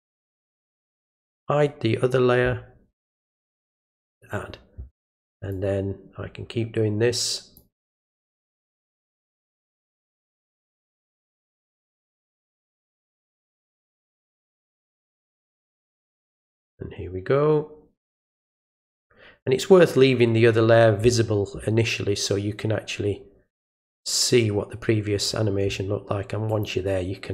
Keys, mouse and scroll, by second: 1.2 click, 3.6 click, 5.5-7.6 drag, 10.0 click, 11.3-12.4 drag, 14.4 click, 16.6-18.4 drag, 23.6-25.3 drag, 26.5 click.